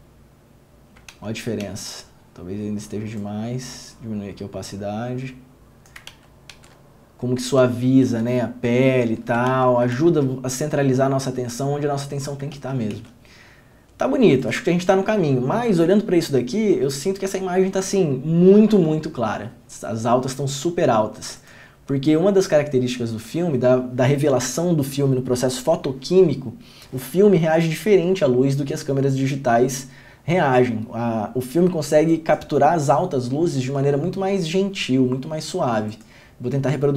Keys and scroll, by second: 1.3 ctrl+d, 1.8 ctrl+d, 6.3 ctrl+d, 6.7 ctrl+d, 8.3 ctrl+d, 9.7 ctrl+d, 10.1 ctrl+d, 13.1 ctrl+d.